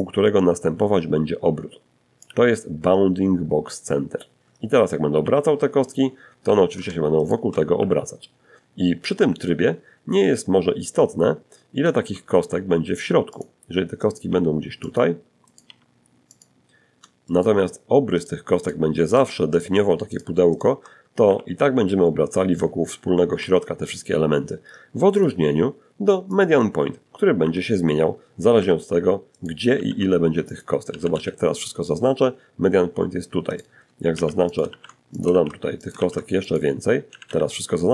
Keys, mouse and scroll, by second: 3.4 r, 4.7 Escape, 5.4 shift+right click, 6.0 r, 7.4 Escape, 10.1 shift+d, 11.5 click, 12.3 right click, 12.5 g, 13.1 click, 13.7 right click, 13.9 g, 14.5 click, 15.5 shift+right click, 16.4 shift+right click, 16.9 shift+right click, 17.3 shift+right click, 17.8 shift+click, 18.3 shift+click, 18.8 shift+click, 19.5 shift+r, 21.6 Escape, 23.4 click, 24.5 click, 25.6 r, 26.8 Escape, 27.6 shift+right click, 28.0 shift+d, 28.7 shift+click, 29.1 shift+a, 29.3 shift+a, 31.7 right click, 32.3 shift+d, 32.7 shift+click, 32.9 shift+d, 33.4 shift+click, 33.6 shift+d, 34.0 shift+click, 34.7 shift+click, 35.5 a.